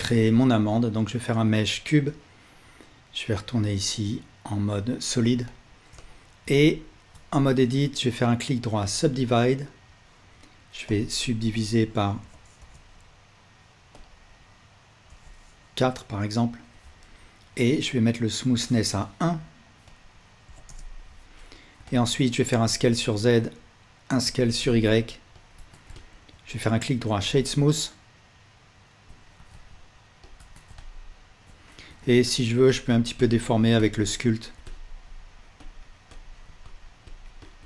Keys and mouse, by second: 0.0 shift+a, 3.0-3.6 drag, 5.5-21.8 alt+drag, 7.2 Tab, 7.9-21.8 right drag, 21.8-23.5 alt+middle drag, 24.2 s, 25.6 Tab, 26.0-29.1 alt+middle drag, 29.4 s, 30.4 Tab, 30.8-31.5 alt+drag, 31.9 ctrl+Tab.